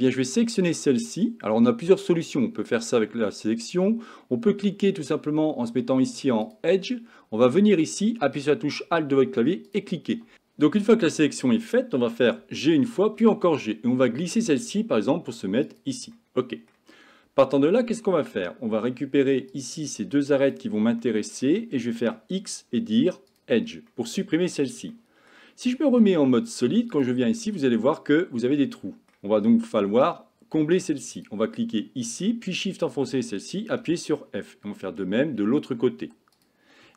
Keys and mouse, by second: 6.5 click, 12.4 g, 16.2 middle click, 19.6-20.6 drag, 21.1 middle click, 22.1 x, 23.9 middle click, 25.0 shift+middle click, 26.0 z, 27.5-29.2 middle drag, 31.2 click, 32.9 shift+click, 33.9 f, 34.2 middle click.